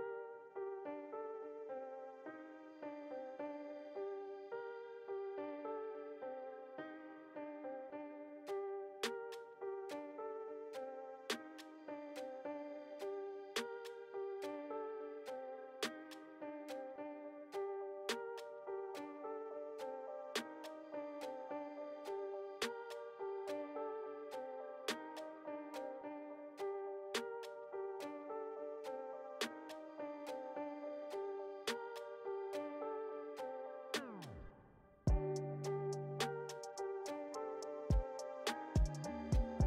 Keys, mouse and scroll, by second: 1.0-2.3 middle drag, 2.3-5.5 ctrl+drag, 5.5 p, 7.0 click, 7.6 f, 8.3-15.0 drag, 15.6 middle click, 16.3-19.3 drag, 19.3-20.6 middle drag, 20.6 space, 21.1 f, 21.9-24.9 drag, 25.5 space, 26.0 f, 26.7-29.7 drag, 30.1 middle click, 30.5 f, 31.4-34.2 drag, 34.2 middle click, 35.1-39.6 drag.